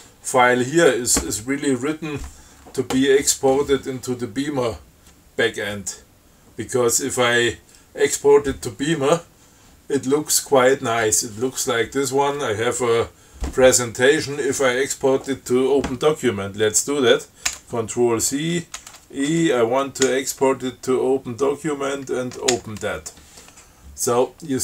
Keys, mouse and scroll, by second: 17.7 ctrl+c, 19.1 ctrl+e, 20.3 o, 22.8 shift+o.